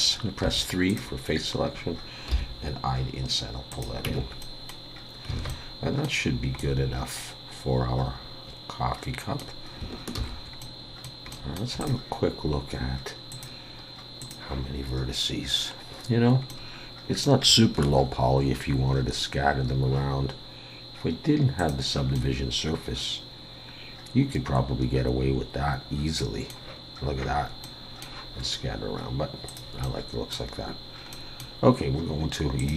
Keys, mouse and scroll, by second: 0.4 3, 0.9 click, 2.4 i, 4.1 Tab, 4.4 middle click, 4.9-5.3 scroll down 3, 5.3 alt+a, 5.5 middle click, 6.2-6.6 scroll down 2, 6.6 middle click, 10.8 ctrl+s, 10.8 middle click, 11.3 middle click, 11.8 click, 14.0 click, 16.5 middle click, 18.5-19.3 scroll up 1, 19.3 scroll down 1, 21.6 click, 22.1 middle click, 27.6 middle click, 29.5 click, 29.8 middle click, 31.1 middle click.